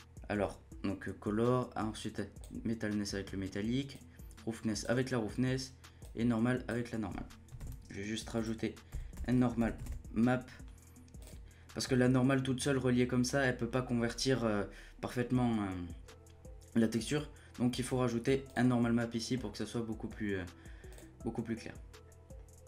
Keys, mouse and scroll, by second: 3.9-6.1 drag, 7.6 shift+a, 19.0-19.8 middle drag, 19.8-20.1 scroll up 1, 20.1-21.7 middle drag, 21.7 click, 22.0-22.5 scroll down 1.